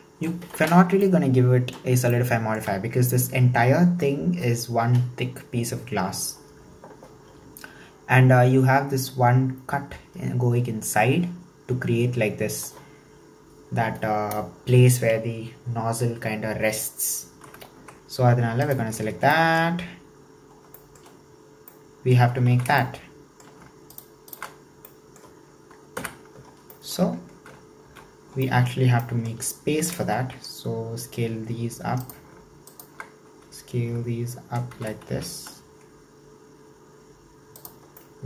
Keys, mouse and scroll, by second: 0.5-1.0 scroll up 2, 1.0-5.2 shift+middle drag, 7.5-8.4 scroll up 1, 17.8 Tab, 18.1-18.7 scroll up 1, 18.7 alt+right click, 19.4 shift+middle click, 19.7-20.6 scroll up 4, 20.6 scroll down 2, 20.8 shift+middle click, 21.5-21.8 scroll down 1, 21.8 middle click, 22.6 alt+z, 22.8-23.9 shift+middle drag, 24.3 alt+shift+right click, 24.7 scroll down 1, 24.9-26.0 middle drag, 26.0 KP_1, 26.7-27.9 shift+middle drag, 27.9 alt+z, 28.1 scroll up 2, 28.5-29.8 shift+middle drag, 29.8 s, 32.7 alt+shift+right click, 34.8 s, 37.9 scroll down 2, 38.1-38.2 middle drag.